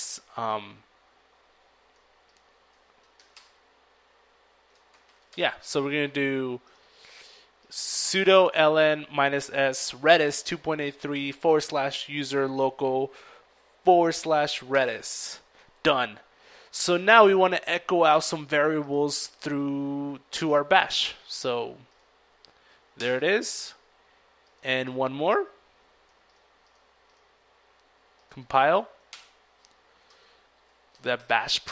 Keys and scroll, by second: 0.9 ctrl+l, 0.9 ctrl+s, 0.9 $, 1.1 ctrl+Return, 2.3 ctrl+c, 2.6 ctrl+e, 2.7 ctrl+a, 2.8 ctrl+r, 2.9 ctrl+Return, 5.6 ctrl+v, 5.6 $, 12.4 ctrl+Return, 20.8 ctrl+Return, 21.0 typing, 27.8 ctrl+Return, 28.5 ctrl+c, 28.7 ctrl+l, 28.9 ctrl+a, 29.0 ctrl+r, 29.3 ctrl+Return.